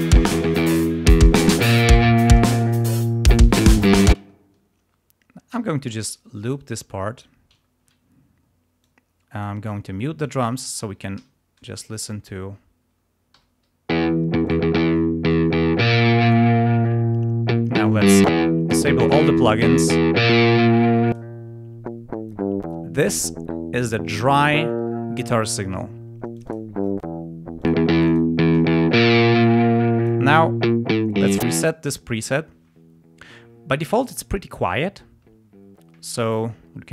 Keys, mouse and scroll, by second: 4.1 space, 5.4 r, 6.1-7.3 drag, 7.6 ctrl+scroll up 2, 8.7 click, 10.1 click, 11.1 l, 13.3 ], 13.8 l, 14.4 click, 15.0 ctrl+scroll down 2, 16.2 click, 17.9 click, 19.6 click, 20.2 click, 21.0 click, 26.3 click, 27.5 click, 27.9 click, 29.4 click, 31.6 click.